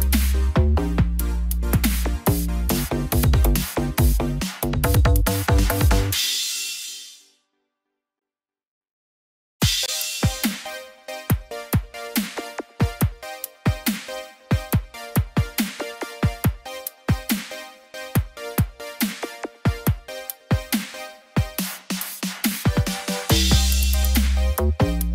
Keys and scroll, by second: 10.2 ctrl+=.